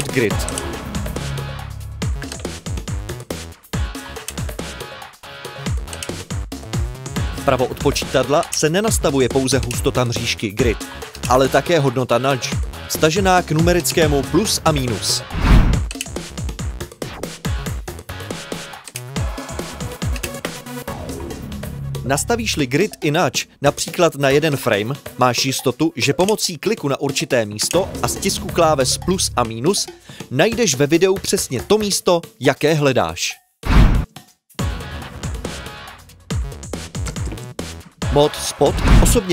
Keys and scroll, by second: 21.2-24.5 typing, 28.8-30.4 typing, 33.8-38.0 typing.